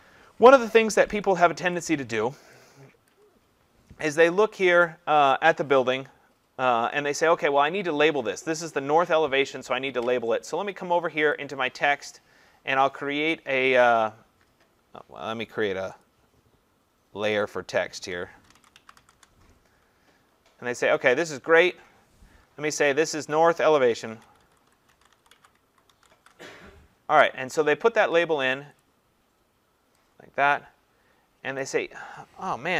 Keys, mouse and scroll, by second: 0.7 click, 1.1 ctrl+=, 1.6 ctrl+=, 3.1 click, 11.5 click, 16.0 click, 17.3 click, 17.5 click, 18.2-19.5 typing, 21.0 click, 23.4-26.7 typing, 25.7-28.1 drag, 28.8 click, 31.6 click.